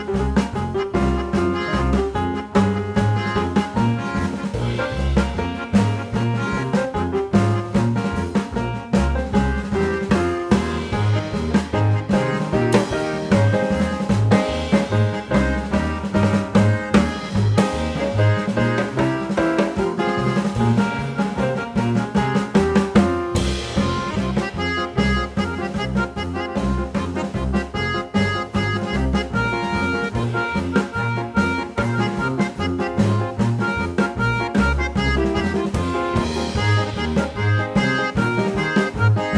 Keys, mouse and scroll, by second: 0.3 click, 1.6 click, 3.0 click, 3.5 click, 4.1 click, 4.5 Tab, 9.0 click, 9.9 click, 10.6 click, 11.5 click, 13.6 click, 14.3 click, 18.0 click, 18.8 click, 19.9 click, 20.5 click, 21.5 click, 22.1 click, 23.1 click, 23.8 click, 24.4 ctrl+alt+c, 25.3 click, 29.4 click, 30.1 click, 34.2 click, 35.5 click, 35.9 click, 36.5 ctrl+g, 37.8 click, 38.8 click.